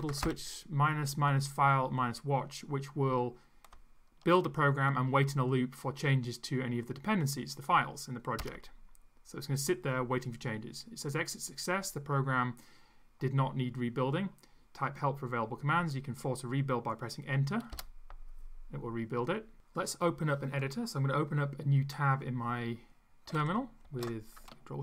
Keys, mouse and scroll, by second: 0.0-0.7 typing, 8.5 Return, 17.9 Return.